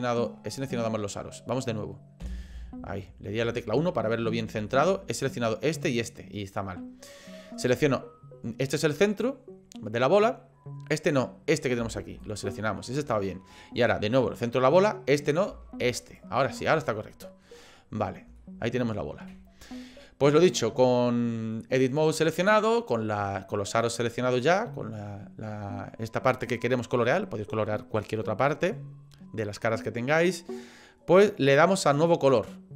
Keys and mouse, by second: 2.2 KP_1, 3.6 shift+middle click, 4.7 shift+middle click, 12.2 alt+shift+click, 16.0 alt+shift+click, 16.8 middle click, 18.4-21.1 shift+middle drag, 32.1-32.7 drag.